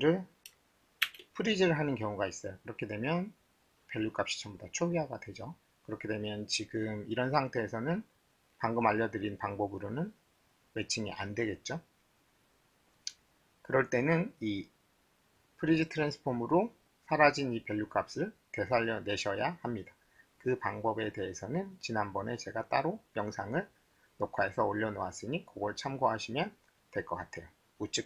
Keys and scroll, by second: 1.0 shift+1.